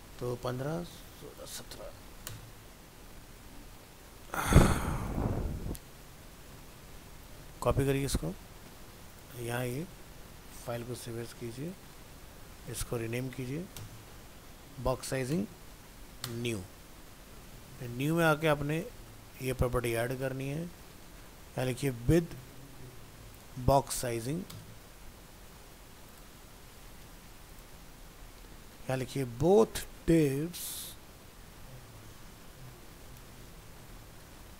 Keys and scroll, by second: 2.7 ctrl+s, 10.1 alt+f, 12.3 ctrl+Tab, 13.7 ctrl+shift+Left, 19.0 ctrl+v.